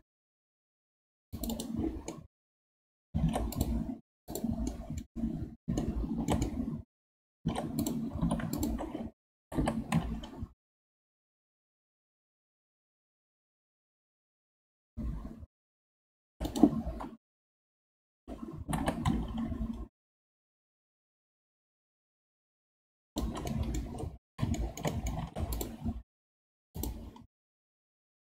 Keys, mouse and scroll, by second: 2.1-3.2 middle drag, 3.2 ctrl+Tab, 4.3 click, 4.7-5.1 middle drag, 5.1-5.8 scroll up 4, 5.8-7.4 shift+middle drag, 7.4 ctrl+Tab, 8.2 2, 8.5 alt+click, 9.4 g, 17.3 KP_1, 18.6 g, 23.5-23.9 middle drag, 23.9-24.5 scroll down 1, 24.5-25.2 shift+middle drag, 25.2 ctrl+Tab, 26.2-26.7 middle drag, 26.7 click.